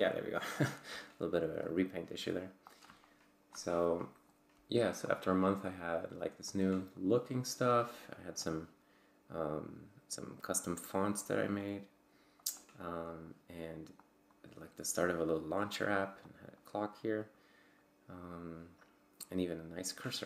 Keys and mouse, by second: 1.6-2.8 drag, 2.9 click, 3.5 click, 5.1 click, 6.5-7.9 drag, 8.4 click, 11.6 click, 13.1 click, 14.0 click, 16.2 click.